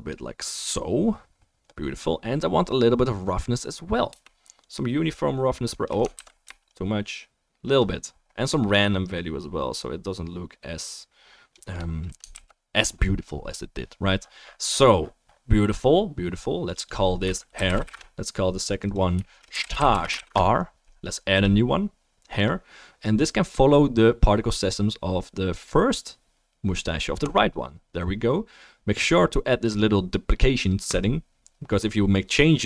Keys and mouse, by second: 6.1 ctrl+z, 12.3 ctrl+s, 16.7 click, 18.7 click, 22.4-23.0 drag.